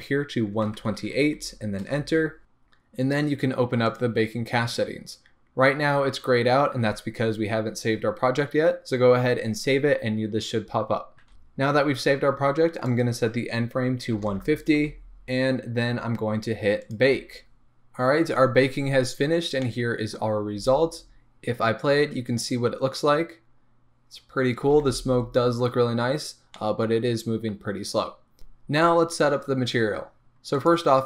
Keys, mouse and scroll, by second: 2.1 Return, 3.9 click, 4.3-5.8 scroll down 1, 11.3 Return, 11.3-17.6 drag, 17.6-31.0 middle drag, 20.6 space, 25.0 space.